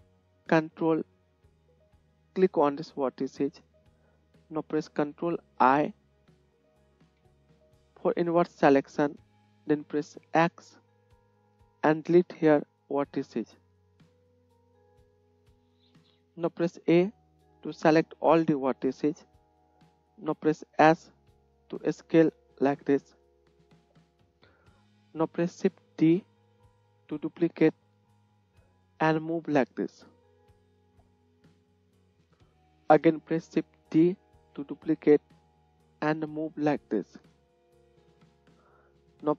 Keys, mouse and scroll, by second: 3.0 ctrl+middle click, 3.0 ctrl+right click, 7.1 ctrl+i, 10.4 x, 16.7 a, 16.7 a, 20.2 s, 23.3 Tab, 24.1 Tab, 25.9 shift+d, 34.0 shift+d.